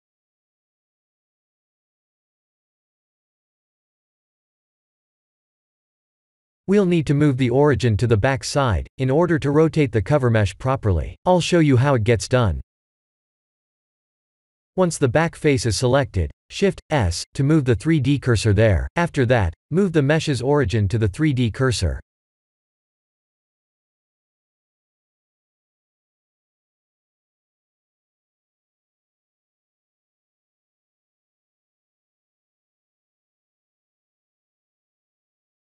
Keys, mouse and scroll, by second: 0.0 3, 0.1 Tab, 2.6 Tab, 2.9 3, 3.2 click, 3.7 click, 4.2 click, 5.0 shift+z, 6.3 Tab, 7.4 shift+h, 8.0 Tab, 8.4 3, 8.6 click, 9.5 click, 10.0 middle click, 11.4 ctrl+a, 12.6 Tab, 13.1 ctrl+a, 13.5 Tab, 14.0 3, 14.2 click, 16.4 shift+s, 20.2 Tab, 20.2 click, 24.1 ctrl+z, 26.6 shift+s, 28.9 click, 29.8 click, 30.4 click, 31.0 ctrl+z, 31.5 ctrl+z, 32.1 ctrl+z, 33.3 click.